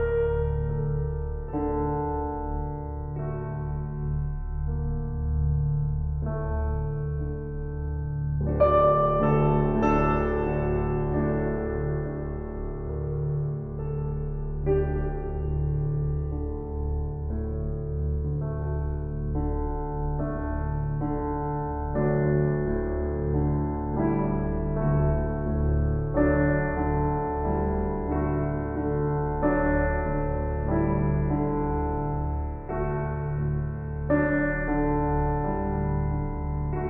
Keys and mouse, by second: 0.9 click, 5.6 ctrl+s, 11.2 click, 13.4 typing, 13.9 Return, 17.2 click, 18.7 ctrl+s, 23.4 ctrl+s, 27.3 Tab, 30.8 Tab, 34.3 ctrl+s.